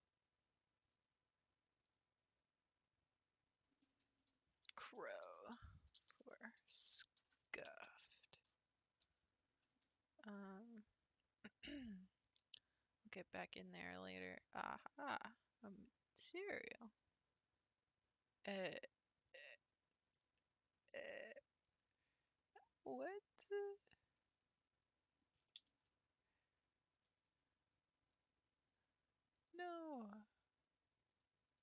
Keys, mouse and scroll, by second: 0.8 click, 1.8 click, 3.5-6.7 drag, 10.0-10.6 scroll down 1, 11.5 click, 12.6 click, 15.0-18.1 drag, 19.3-20.1 middle drag, 20.1-20.9 scroll down 4, 21.1-21.7 middle drag, 21.7-22.6 scroll up 4, 24.0 scroll down 1, 26.1 ctrl+z, 28.1-31.2 drag, 31.5-31.6 drag.